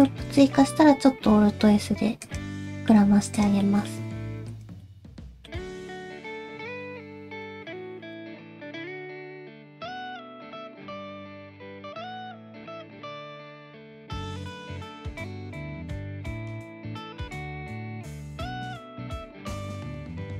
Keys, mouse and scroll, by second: 0.5 alt+s, 2.6 middle click, 3.4 click, 3.6 middle click, 4.1 g, 4.8 middle click, 5.6 scroll down 1, 5.9 middle click, 8.7 g, 9.5 middle click, 9.9 alt+click, 10.1 alt+z, 10.3 alt+z, 10.5 middle click, 11.0 alt+z, 11.1 alt+click, 11.5 g, 12.4 middle click, 12.8 alt+z, 12.9 scroll down 2, 13.0 middle click, 13.8 ctrl+click, 13.8-14.1 scroll up 2, 14.0 ctrl+click, 14.1 middle click, 14.3 g, 15.3 click, 15.7 shift+click, 15.9 shift+click, 16.0 middle click, 16.2 g, 16.7 middle click, 17.2 scroll down 1, 17.3 middle click, 18.2 shift+middle click, 18.4 middle click, 20.2 shift+middle click.